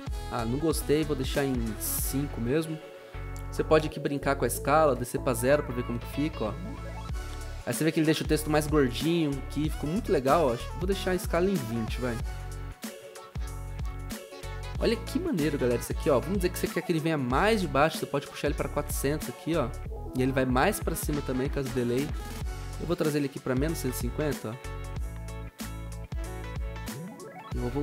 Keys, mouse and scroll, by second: 2.0 typing, 2.3 Return, 4.7 typing, 4.8 Return, 11.4-12.3 typing, 18.0-19.1 typing, 22.8-24.3 typing.